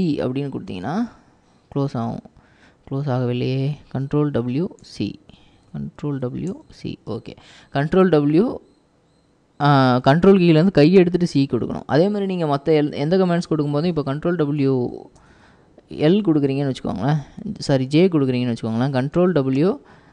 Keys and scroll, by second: 0.0 ctrl+c, 4.1 ctrl+w, 4.9 ctrl+c, 6.1 ctrl+w, 6.6 c, 15.0 ctrl+w, 15.3 ctrl+n, 19.2 ctrl+w, 19.6 ctrl+j.